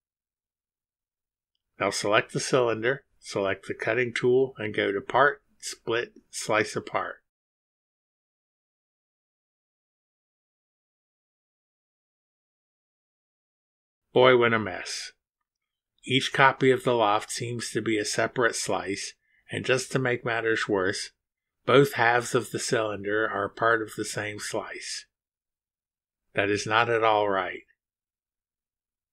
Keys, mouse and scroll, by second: 0.3-1.4 middle drag, 3.5 click, 4.2 scroll up 1, 5.1 ctrl+click, 7.3 click, 9.5 click, 12.0-12.5 scroll down 4, 13.2 click, 13.7 scroll down 1, 14.3-14.9 scroll down 2, 15.7-16.3 scroll down 1, 17.1-17.4 scroll down 2, 18.0-18.7 scroll down 2, 19.2-19.7 scroll down 1, 20.1-20.7 scroll down 2, 22.5 click, 28.3 click.